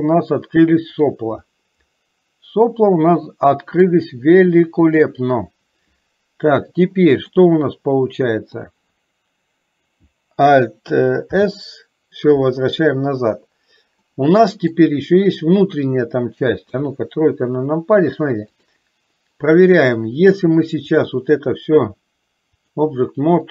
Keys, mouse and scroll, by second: 1.6-4.1 middle drag, 5.0 click, 7.4-9.0 middle drag, 11.5 alt+s, 14.2 middle click, 16.7 KP_3, 21.0-22.8 drag.